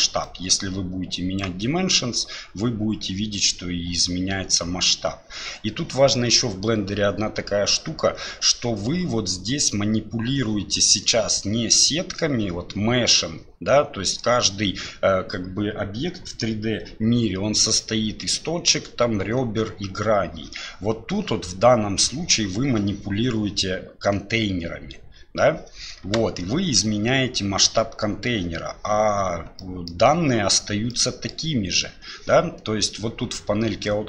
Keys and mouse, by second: 0.2-1.4 drag, 6.1-6.6 middle drag, 29.6 middle click, 30.9 middle click.